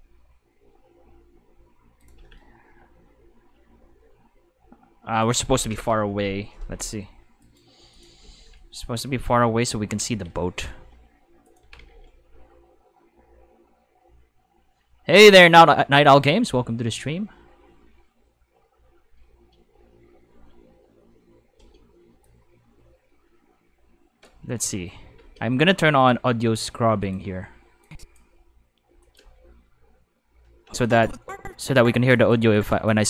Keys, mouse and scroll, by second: 1.9-2.8 typing, 2.0 click, 5.2 right click, 7.4 right click, 7.5-12.5 typing, 7.9 click, 9.6 click, 16.0 click, 20.2 space, 21.5 space, 22.2-24.2 drag, 24.4 space, 25.2 space, 25.9 click, 27.0 click, 27.8 drag, 28.3 space, 28.9 space, 29.0 click, 29.2 space, 30.7 space, 30.8 click, 32.1 click, 32.5-32.9 drag.